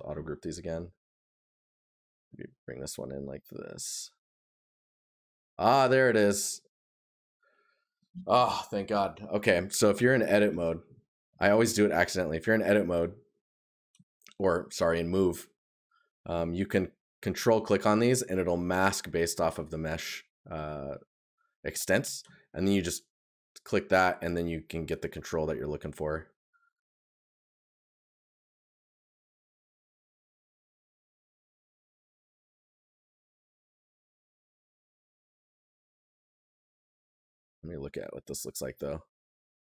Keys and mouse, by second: 11.0 right click, 13.9 right click, 15.3 right click, 18.7 right click, 27.8 right click, 30.4 right click, 38.0 right click, 39.6 right click.